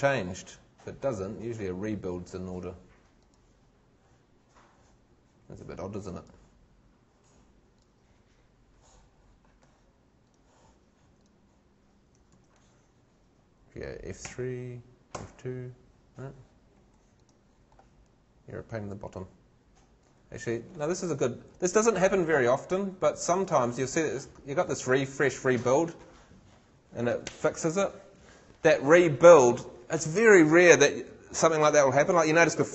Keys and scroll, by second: 14.2 shift+F3, 15.1 shift+F2, 16.7 shift+Escape, 20.2 shift+Escape.